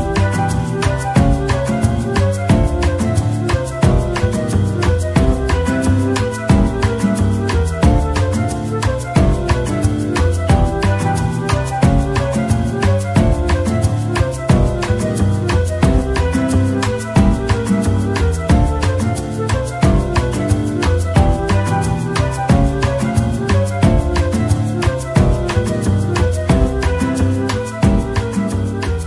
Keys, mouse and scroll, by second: 0.3 ctrl+l, 0.9-1.9 typing, 3.0 middle click, 6.5 ctrl+l, 7.8 middle click, 9.2 scroll up 1, 9.7 scroll down 1, 10.4 middle click, 13.1 double click, 13.8 ctrl+l, 14.7-15.2 scroll down 1, 15.2-15.5 typing, 19.2 middle click, 19.9-20.8 typing, 21.2 right click, 23.4-24.3 typing, 25.4 Tab, 25.8 scroll down 1, 26.1 middle click, 28.6 double click.